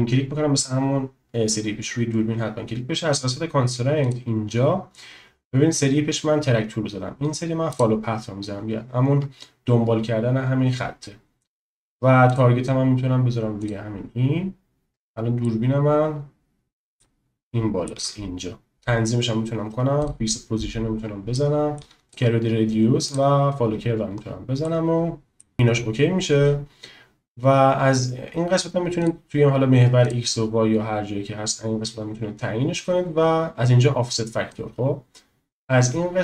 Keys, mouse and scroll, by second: 4.0-8.2 drag, 12.2 click, 15.4-17.0 middle drag, 17.4 shift+click, 20.1 click, 21.3-21.8 shift+drag, 22.1 click, 23.2 click, 24.6 middle click, 29.1 click, 30.1 click, 34.5-36.2 drag.